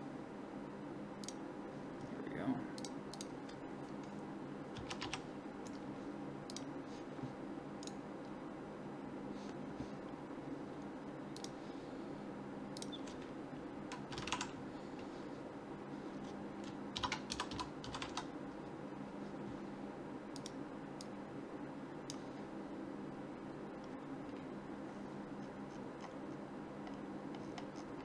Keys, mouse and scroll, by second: 7.8-11.4 right drag.